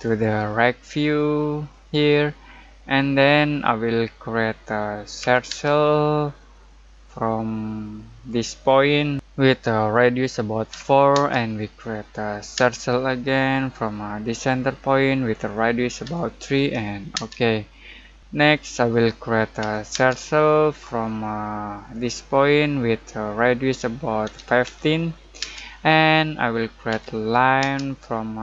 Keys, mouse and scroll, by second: 3.5-5.2 scroll down 1, 5.2 c, 5.5 space, 8.2 click, 10.7 4, 11.1 space, 14.2 click, 16.0 3, 17.1 space, 18.2-19.6 middle drag, 19.6 c, 19.9 space, 21.9 click, 24.2-25.4 typing, 26.9 l, 27.6 space.